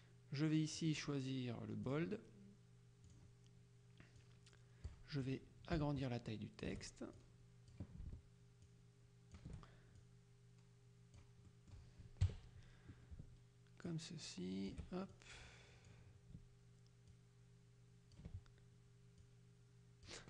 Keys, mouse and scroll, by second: 0.9 click, 2.0 click, 3.2 click, 4.3 click, 5.8-8.3 ctrl+shift+drag, 8.7-9.9 ctrl+shift+drag, 10.0-11.8 ctrl+shift+drag, 12.3 KP_Subtract, 14.0 ctrl+shift+click, 17.2 ctrl+click, 19.3 click.